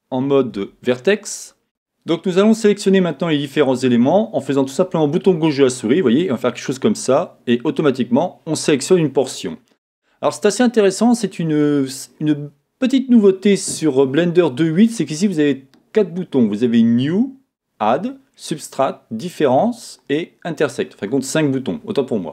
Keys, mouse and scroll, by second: 5.4 click.